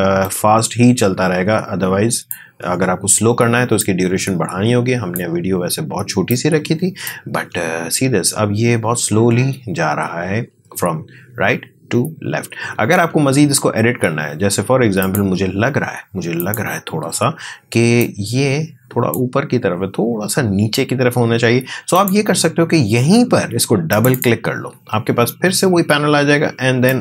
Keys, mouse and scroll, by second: 7.3 space, 12.9 space, 15.0-21.5 drag, 21.9 click, 26.9-27.0 drag.